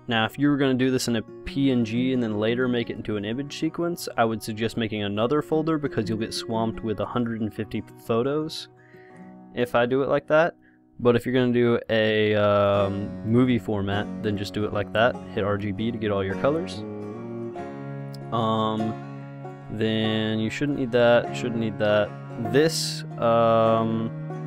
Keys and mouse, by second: 0.0-1.9 drag, 9.2 click, 10.6 click, 12.3-14.1 drag, 15.1-16.9 drag, 19.7-24.1 drag.